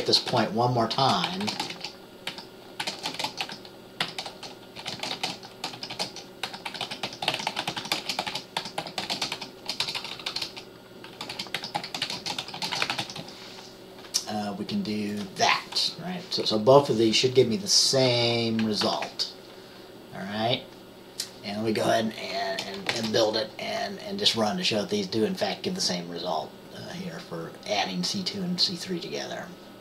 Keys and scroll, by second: 2.4-13.3 typing, 18.2 typing, 23.0 ctrl+b.